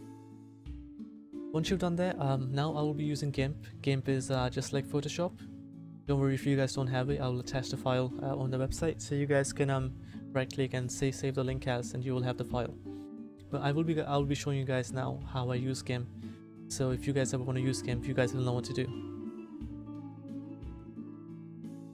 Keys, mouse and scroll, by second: 0.0 Return.